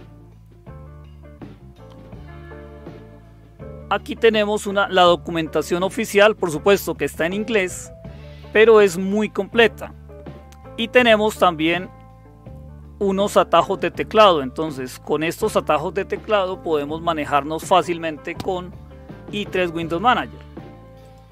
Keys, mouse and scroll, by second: 2.2-2.7 scroll down 2, 3.7-5.5 scroll down 3, 5.9 scroll down 2, 6.7-8.3 scroll down 6, 8.7-9.9 scroll down 2, 10.0-10.7 scroll down 2, 10.7-12.2 scroll up 2, 12.2-13.3 scroll up 1, 13.7 scroll up 2, 21.0 click.